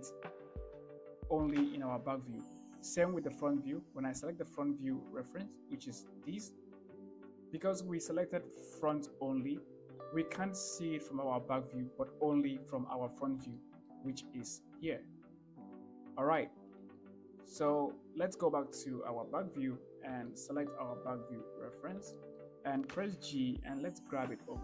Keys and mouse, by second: 4.8 click, 12.6 KP_1, 13.8-14.1 shift+drag, 17.3 shift+click, 19.4 ctrl+KP_1, 20.6 shift+middle drag, 21.6 click, 22.4 shift+middle drag, 23.4 g.